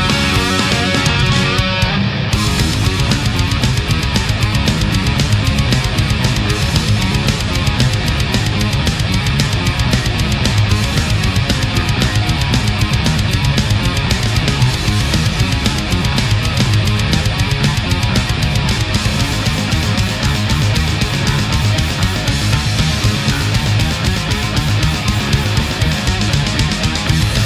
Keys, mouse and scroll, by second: 2.1-4.2 middle drag, 5.5 ctrl+z, 6.2 middle click, 8.1 a, 8.4 right click, 9.1-10.8 drag, 10.8 middle click, 12.4 space, 13.6 click, 15.2 click, 22.4 shift+click, 23.6 Return, 26.0 a.